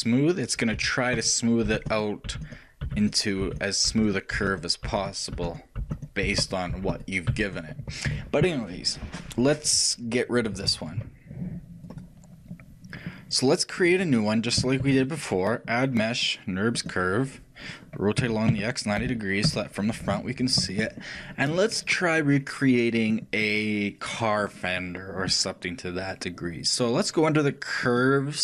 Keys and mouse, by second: 1.0-9.3 w, 12.6-14.9 drag, 15.1 shift+a, 18.5 r, 28.2-28.4 drag.